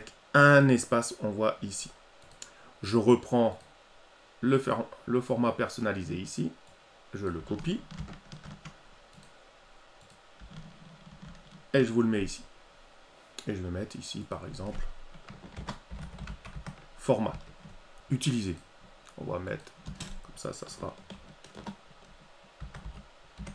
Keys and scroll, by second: 7.2 ctrl+c, 11.0 ctrl+v.